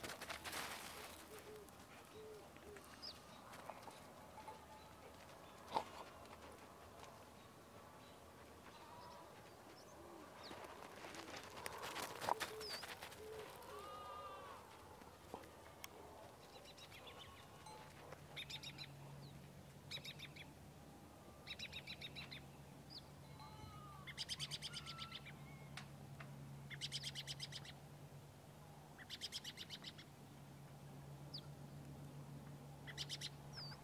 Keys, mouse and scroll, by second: 0.9-7.8 drag, 9.0-9.6 scroll up 1, 9.6 alt+scroll up 1, 9.7 alt+scroll down 1, 9.9-11.4 alt+scroll up 3, 11.7-14.5 drag, 15.5 scroll down 1, 17.7 click, 25.2 alt+scroll up 1, 25.4-33.3 drag, 33.7 ctrl+z.